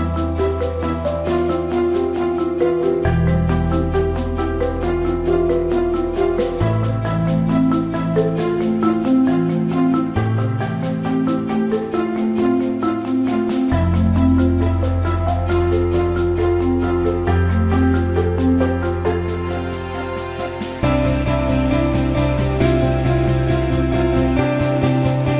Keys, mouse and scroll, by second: 2.4 middle click, 7.6 middle click, 12.4 middle click, 12.9 middle click, 14.2 middle click, 14.7 middle click, 22.7 middle click, 22.9 middle click, 23.2 middle click, 23.3 middle click, 23.5 middle click, 23.6 middle click, 23.8 middle click, 24.6 middle click, 24.7 middle click, 24.9 middle click, 25.1 middle click.